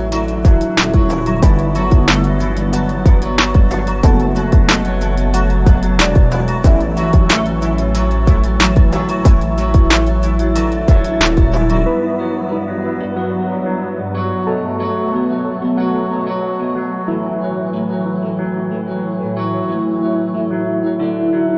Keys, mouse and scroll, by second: 0.9 ctrl+z, 2.0 click, 5.2 ctrl+z, 6.3 click, 18.9 ctrl+z, 19.7 click.